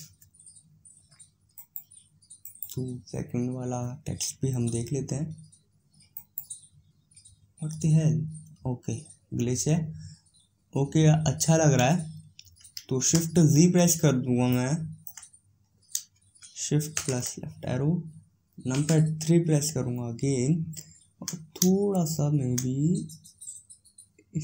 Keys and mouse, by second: 4.4 right click, 6.9-12.8 right drag, 12.9 shift+z, 16.1 middle click, 16.9 shift+Left, 18.6 KP_3, 22.1-24.3 middle drag, 24.3-24.4 right drag.